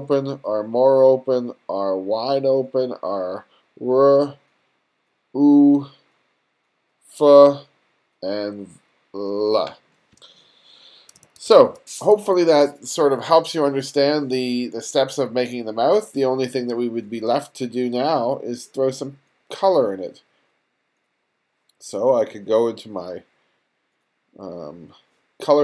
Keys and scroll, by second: 10.9 1, 11.9 space.